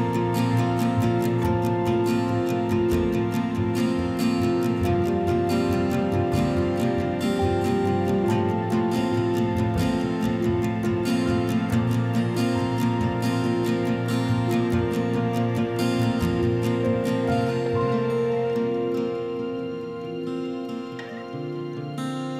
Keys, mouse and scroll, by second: 0.0-5.3 typing, 0.6-2.9 drag, 6.4 right click, 7.7 click, 9.6 click, 14.5-15.9 typing, 16.9-19.0 typing, 19.4 right click, 21.0 click, 21.7 click.